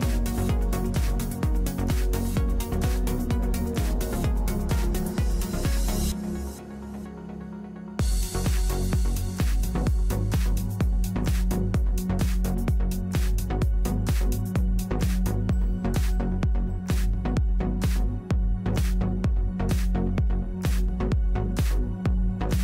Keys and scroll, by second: 2.4 t, 7.6 Escape, 9.2-9.9 typing, 9.9 Return, 11.8 |, 14.9 \, 16.4 Delete.